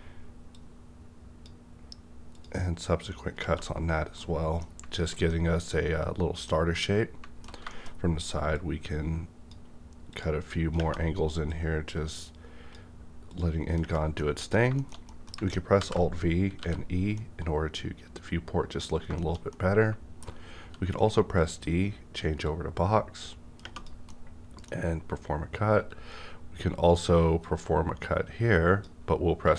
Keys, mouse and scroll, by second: 0.8-2.3 drag, 3.8-4.2 scroll down 1, 4.5-5.0 alt+middle drag, 7.9-8.5 shift+scroll up 1, 8.5-10.7 drag, 8.5-8.8 scroll up 1, 11.5-13.8 drag, 14.1 middle click, 14.6 scroll down 1, 14.8 shift+middle click, 15.7 alt+v, 16.6 e, 17.1-19.1 middle drag, 19.1 shift+scroll down 1, 19.5 shift+middle click, 20.3 scroll up 1, 20.5 d, 21.3 click, 22.4-24.3 drag, 24.1-26.9 middle drag, 27.4 click, 27.4-29.5 drag, 27.4-29.4 middle drag, 29.4 w.